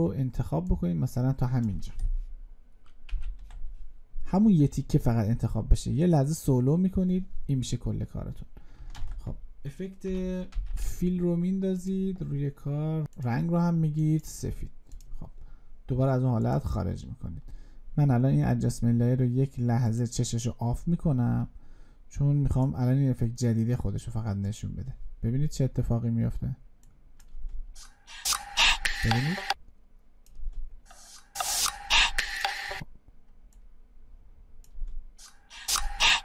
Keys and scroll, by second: 2.9 alt+], 8.8 ctrl+space.